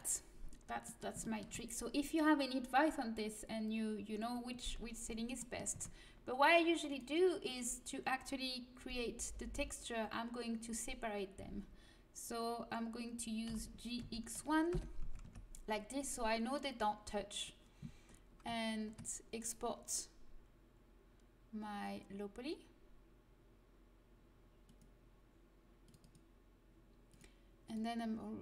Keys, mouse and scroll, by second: 5.7 Tab, 6.8-8.8 drag, 8.8 l, 9.2 l, 9.3 l, 9.5 click, 9.6 click, 13.4 g, 14.4 click, 15.0 a, 15.2 Tab, 19.4-21.4 drag, 26.0 click.